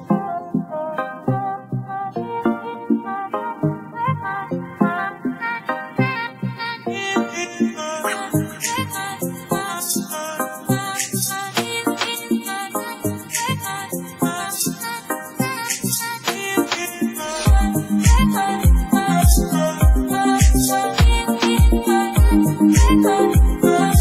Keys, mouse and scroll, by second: 5.1-6.4 scroll down 2, 6.9 middle click, 7.2 KP_1, 7.5-8.0 scroll up 5, 7.6 Tab, 7.9 shift+middle drag, 8.4 shift+middle drag, 8.6-9.8 scroll down 2, 8.9 shift+middle drag, 9.8 click, 10.2-10.8 scroll up 3, 10.8 scroll down 3, 10.9 Tab, 11.0-12.1 middle drag, 12.1-13.4 scroll up 7, 12.3 shift+middle click, 13.4 KP_1, 13.6 scroll down 3, 13.7 shift+middle click, 13.9 Tab, 14.1 alt+a, 14.3 shift+middle click, 14.5 click, 15.1 click, 15.8-17.0 shift+middle drag, 20.5 click, 21.0 shift+middle click, 21.4 click, 22.8-24.0 drag.